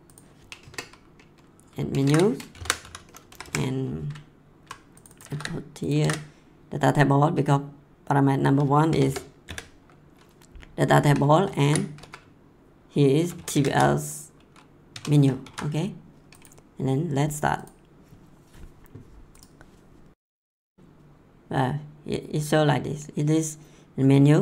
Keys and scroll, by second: 0.6 Return, 1.9 Return, 2.1 ctrl+v, 2.5 shift+9, 2.8 ;, 3.3 Left, 5.3 ctrl+c, 6.0 ctrl+v, 8.9 BackSpace, 9.4 ,, 10.9 Left, 11.6 ctrl+v, 11.9 Right, 13.1-14.4 typing, 14.9 Tab, 15.4 ctrl+s.